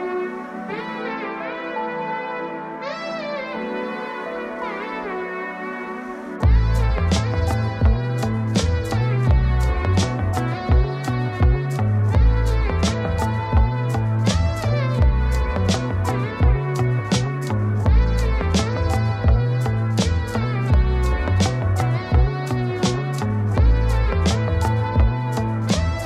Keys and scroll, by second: 7.7 ctrl+g, 18.0 ctrl+space.